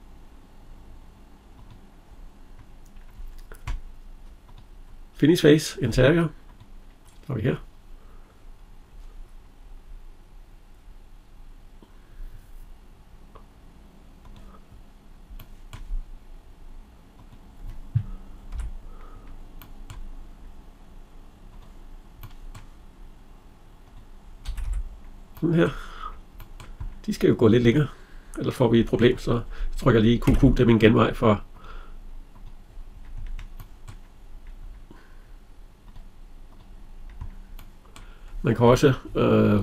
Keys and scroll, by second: 18.2 Escape, 24.3 Escape.